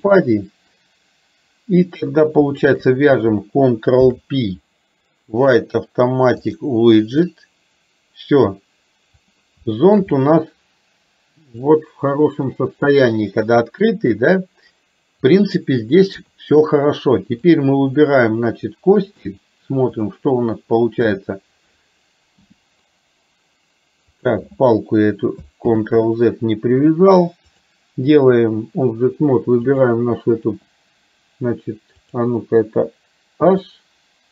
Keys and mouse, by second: 2.6 shift+click, 4.0 ctrl+p, 9.2 click, 9.9 shift+middle drag, 10.2-13.9 middle drag, 15.2 click, 16.2 KP_3, 17.5 click, 19.2-20.2 drag, 26.1 ctrl+z, 27.6-28.6 drag, 29.7 click, 33.5 h.